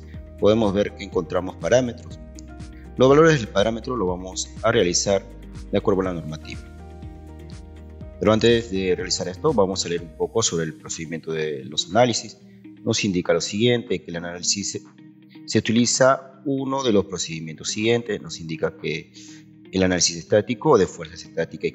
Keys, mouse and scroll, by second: 7.3 Escape, 8.2 scroll down 2, 9.1 scroll up 2, 13.1 ctrl+1, 17.7 ctrl+click.